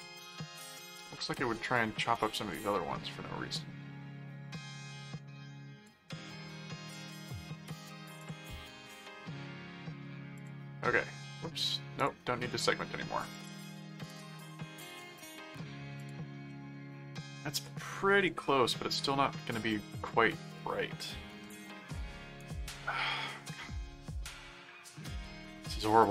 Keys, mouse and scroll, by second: 2.5 middle click, 4.5 click, 6.3-7.5 middle drag, 8.2 click, 9.3 middle click, 10.3 click, 12.0 click, 13.3 click, 14.1 click, 14.6 middle click, 16.0 click, 16.5-18.4 middle drag, 21.4 middle click, 22.4 right click, 23.5 middle click.